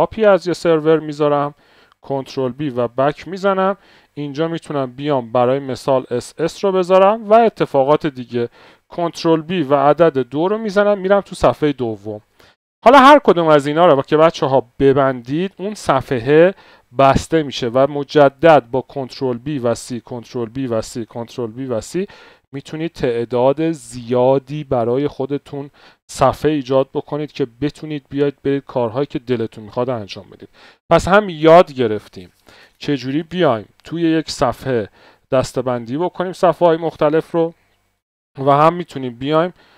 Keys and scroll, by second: 0.2 Return, 2.2 ctrl+b, 2.4 Left, 5.4 typing, 7.1 Return, 7.1 typing, 9.0 ctrl+b, 9.8 KP_2, 14.0 ctrl+d, 14.7 ctrl+d, 18.1 ctrl+b, 18.4 c, 19.9 ctrl+b, 20.2 c, 21.0 ctrl+b, 21.2 c, 38.8 ctrl+b, 39.0 r.